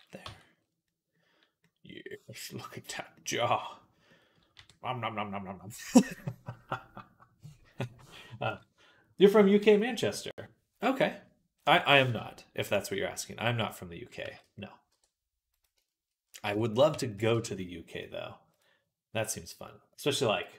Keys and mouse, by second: 0.1 Tab, 0.7-2.0 middle drag, 4.4 r, 8.3 KP_3, 11.6 Tab, 14.1 g, 15.3 shift+click, 16.1-19.1 right drag, 16.3 Tab, 17.0 Tab, 17.0 a, 17.2 g, 19.1-20.3 drag.